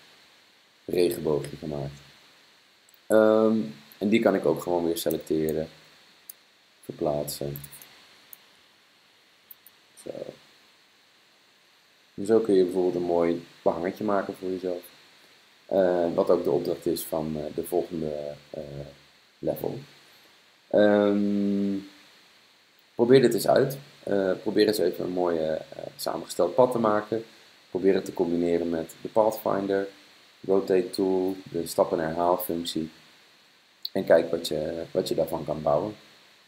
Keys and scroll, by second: 8.6 super+d, 9.4 super+d.